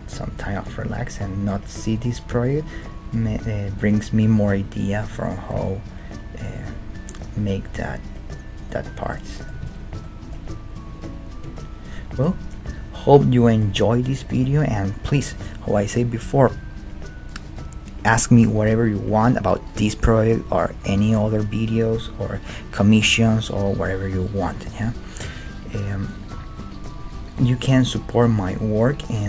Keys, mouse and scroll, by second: 1.2-4.7 right drag, 3.2 g, 5.5 Tab, 9.6 ctrl+z, 11.4 ctrl+z, 12.6 KP_1, 13.4-16.2 middle drag.